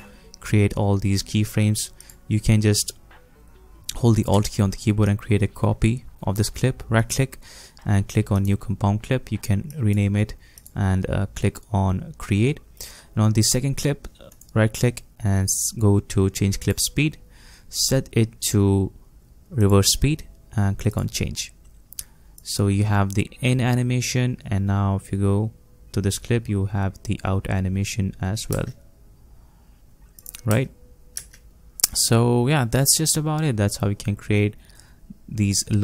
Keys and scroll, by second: 28.6 space, 31.2 space.